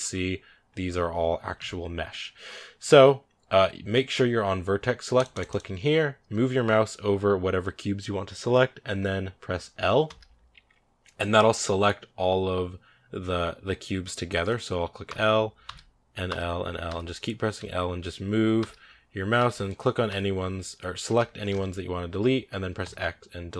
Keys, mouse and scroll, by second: 1.4 a, 5.0 click, 5.2 click, 9.9 l, 14.9-17.4 typing, 18.4 l, 19.2 l, 19.9 l, 20.9 l.